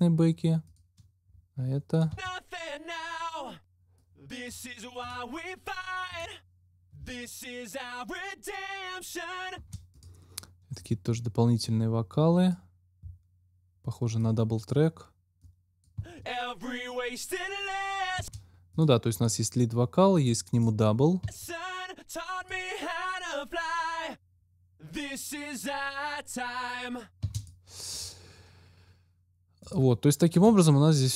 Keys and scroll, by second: 2.1 space, 9.5 space, 15.9 space, 18.1 space, 21.1 space, 27.1 space.